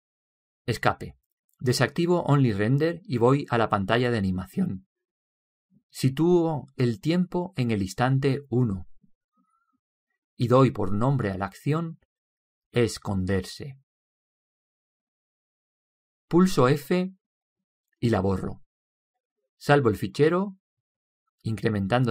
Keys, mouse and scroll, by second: 0.7 Escape, 2.0 Escape, 4.2-7.0 drag, 9.5-11.2 drag, 11.4-13.2 drag, 17.9-19.0 drag, 19.4-22.1 drag.